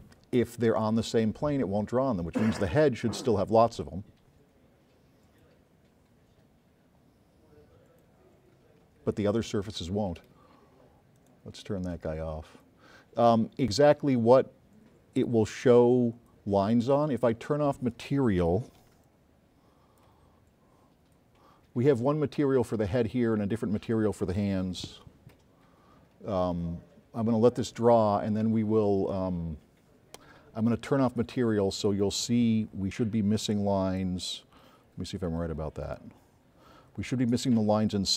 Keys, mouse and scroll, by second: 12.6 click, 17.2 middle click, 17.4 middle click, 20.5 s, 20.7-21.8 drag, 23.7 middle click, 24.4 middle click, 37.6 click.